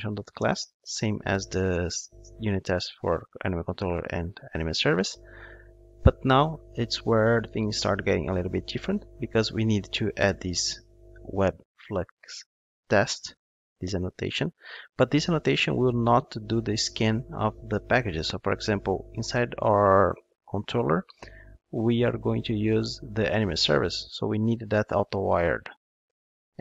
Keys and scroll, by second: 12.6 Return.